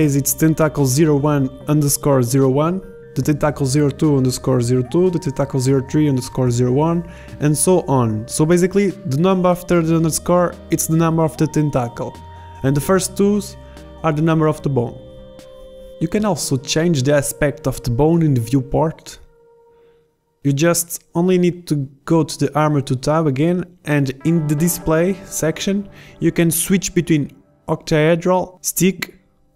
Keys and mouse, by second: 1.8-5.9 right drag, 7.2-8.0 right drag, 9.3-10.8 right drag, 12.1-13.6 right drag, 13.6 middle click, 14.4-15.4 right drag, 16.9 b, 16.9 KP_7, 17.6 z, 28.3 middle click, 29.0 z.